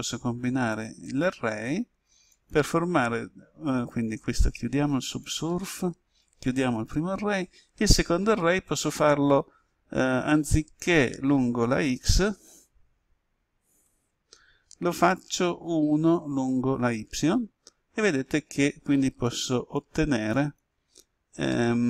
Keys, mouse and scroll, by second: 1.0-6.0 drag, 12.3 0, 13.8 Tab, 15.1 1, 17.0 Tab, 19.2 click, 21.4-21.8 middle drag.